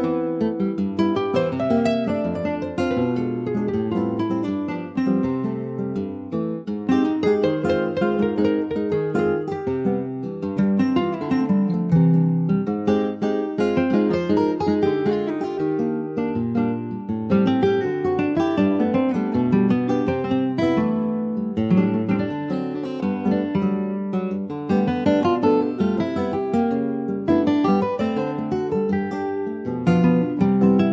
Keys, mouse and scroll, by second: 1.2 middle click, 1.9 ctrl+s, 2.9 click, 4.1 middle click, 4.4 ctrl+s, 5.1 /, 5.7 Tab, 6.7 Tab, 7.2 ctrl+a, 7.9 middle click, 8.2 Tab, 8.5 click, 9.0 shift+middle click, 9.7 2, 9.9 click, 10.2 middle click, 10.7 shift+click, 11.1-12.2 middle drag, 12.2 ctrl+b, 15.3 Tab, 15.5 click, 15.9 middle click, 16.4 ctrl+s, 16.5 click, 16.8-19.4 right drag, 19.4 click, 19.9 click, 20.6 click, 21.0 click, 21.3 middle click, 21.8 Tab, 22.2 middle click, 22.6 Tab, 22.8 click, 23.4 ctrl+s, 23.5 click, 24.2 /, 25.1-25.6 scroll down 5, 25.6 click, 25.9-27.3 middle drag, 27.3 ctrl+s, 27.4 click, 27.9 scroll up 2, 28.1 middle click, 28.4 Tab, 28.8-29.8 middle drag, 30.8 alt+middle click.